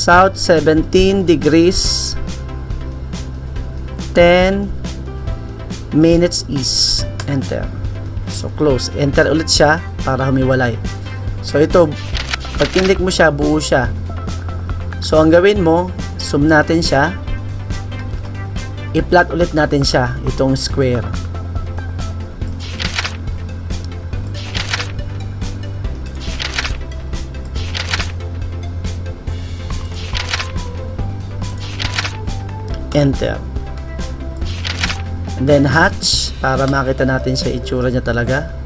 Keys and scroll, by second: 2.9-7.6 typing.